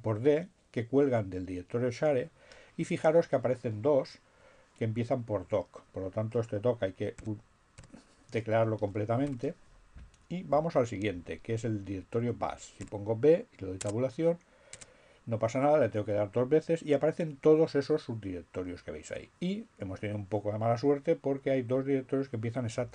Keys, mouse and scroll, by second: 4.6-5.5 typing, 8.8 shift+7, 12.8 b, 13.3 Tab, 14.9 Tab, 21.4-22.5 typing.